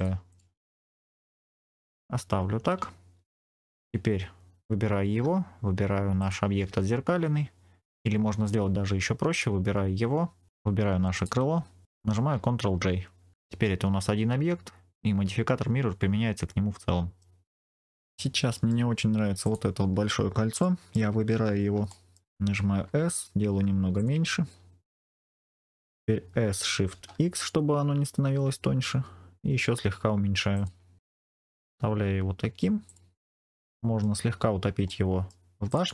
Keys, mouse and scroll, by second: 0.2 click, 0.7 scroll down 2, 1.0 middle click, 2.0-2.8 scroll down 3, 3.4 Tab, 6.1 shift+click, 8.4-9.2 scroll up 3, 9.2 click, 9.6-10.5 scroll down 2, 11.0 shift+click, 12.6 ctrl+j, 13.3 click, 16.4 middle click, 17.6 scroll down 2, 18.1 middle click, 19.3 click, 20.5 shift+middle click, 21.1 scroll up 2, 21.8 scroll up 1, 21.8 shift+middle click, 22.6 s, 23.9 click, 24.4-25.0 scroll down 2, 26.2 s, 26.8 shift+x, 30.4 click, 31.0 middle click, 31.0 scroll up 2, 31.7-32.2 scroll down 2, 32.8 click, 33.4 middle click, 34.2-34.8 scroll up 2, 34.8 middle click, 35.6 click.